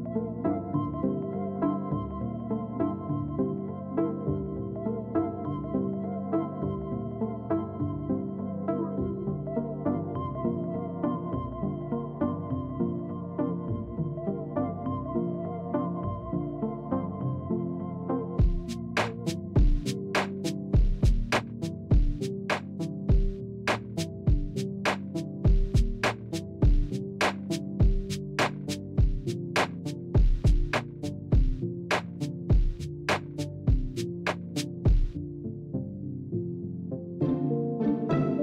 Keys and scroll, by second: 4.9 Tab, 6.3 Tab, 8.0 shift+z, 9.9 s, 12.2 shift+z, 13.2 shift+z, 14.3 s, 15.5 shift+z, 19.5 Tab, 25.3 Tab, 26.3 3, 27.4 shift+d, 28.4 p, 29.2 Tab, 29.9 Tab, 30.7 a, 31.5 KP_7, 31.8 shift+z, 33.6 s.